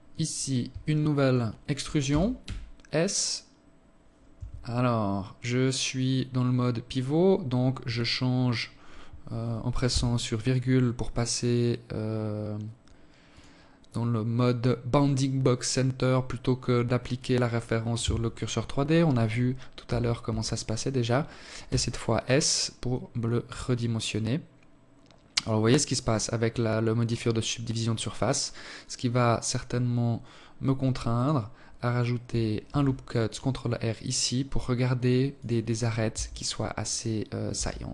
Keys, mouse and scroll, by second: 0.9 e, 8.6 ,, 12.1 click, 13.0 click, 18.6 Tab, 19.0 Tab, 20.4 s, 31.5 ctrl+r, 34.9 Tab, 36.4 Tab, 37.4 KP_7.